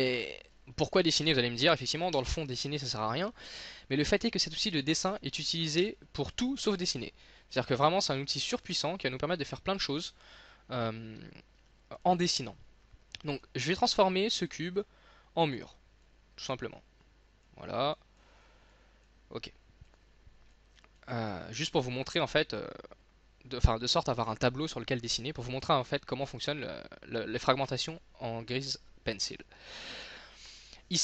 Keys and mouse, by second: 0.1 middle click, 0.6 middle click, 2.2 n, 3.5 click, 4.5 s, 5.9 KP_1, 6.7 KP_5, 12.1-17.1 drag.